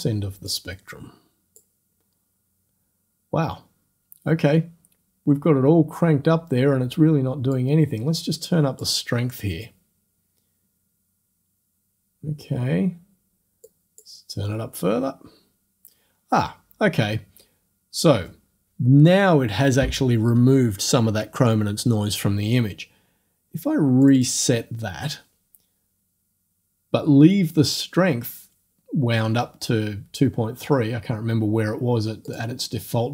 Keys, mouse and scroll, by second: 0.5-1.8 drag, 7.6-9.0 drag, 13.7 click, 24.0 click, 32.3 click.